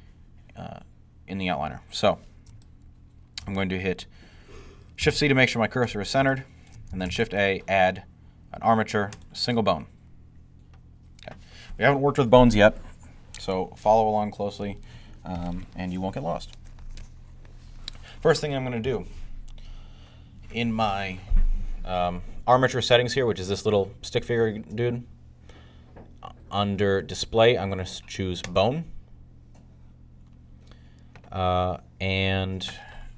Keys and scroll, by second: 4.9 c, 6.9 a.